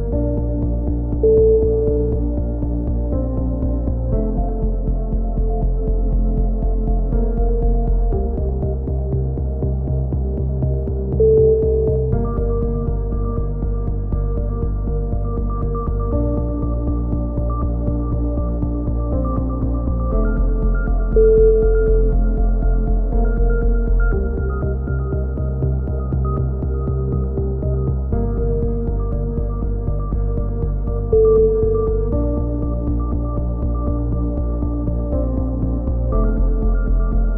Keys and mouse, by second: 0.7 a, 0.8 middle click, 1.5 click, 2.2 middle click, 3.2-4.6 drag, 4.3 f, 4.6 a, 5.1-6.3 drag, 6.3-7.5 right drag, 7.8-9.8 middle drag, 13.8 click, 15.0-16.8 middle drag, 16.8 click, 18.1 click, 19.8 right click, 20.2 middle click, 20.8 click, 21.4 ctrl+z, 21.8-23.5 drag, 23.6 click, 24.3 a, 25.8 z, 26.0 z, 26.3 middle click, 26.5 click, 27.4-29.3 middle drag, 30.0-31.3 middle drag, 32.7-34.3 middle drag, 35.0 ctrl+r, 37.1 a.